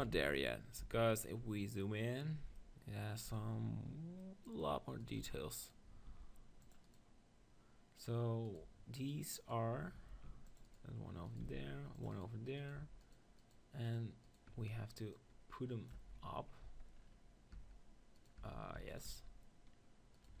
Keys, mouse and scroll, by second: 0.1 z, 0.8 z, 3.4 z, 5.0-6.1 drag, 6.1 ctrl+r, 6.1-16.0 right drag, 10.1 ctrl+r, 11.5 ctrl+r, 15.1-16.9 drag, 16.0 Tab, 16.3 z, 16.6 z, 17.5 Tab, 18.2-20.4 right drag, 18.4 Tab, 18.8 Tab, 19.1 Tab.